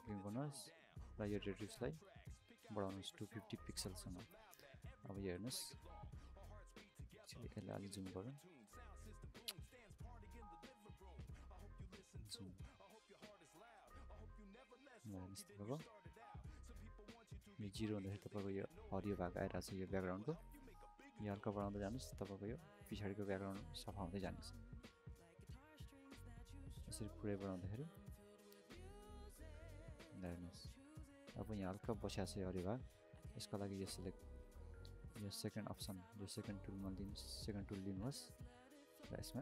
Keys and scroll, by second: 5.4 alt+c, 5.6 ctrl+space, 8.4 ctrl+space.